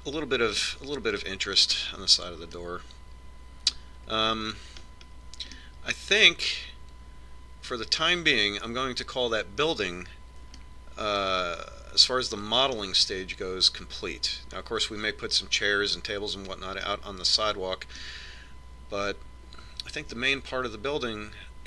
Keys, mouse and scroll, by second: 2.9-6.1 middle drag, 7.0-8.0 middle drag, 8.0 click, 8.1 middle click, 11.6-13.7 middle drag, 18.0-19.9 middle drag, 21.3 middle click.